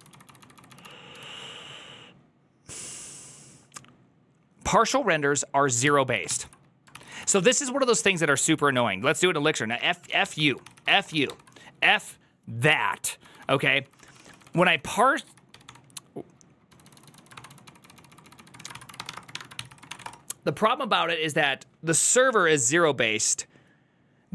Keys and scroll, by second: 7.8-8.5 typing, 15.5 g.